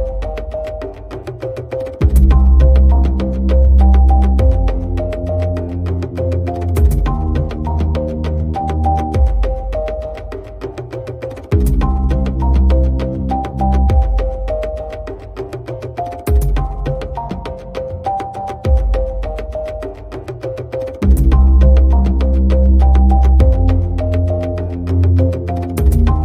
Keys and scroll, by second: 3.3 3, 17.7 a, 23.7 super+z, 24.9 shift+Right.